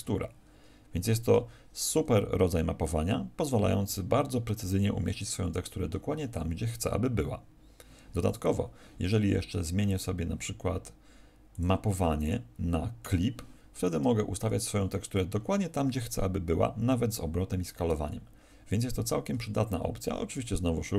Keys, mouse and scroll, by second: 0.1 s, 1.1 click, 7.2 Escape, 8.2 right click, 11.4 click, 19.2 Escape.